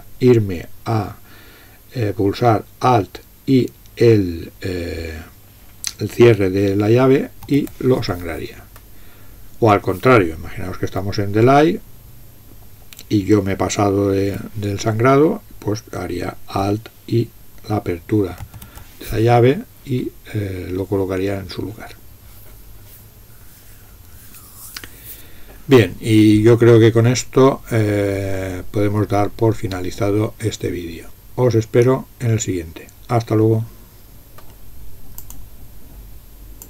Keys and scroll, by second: 7.3 alt+}, 10.9 End, 14.3 Tab, 17.8 Tab, 18.4 alt+{.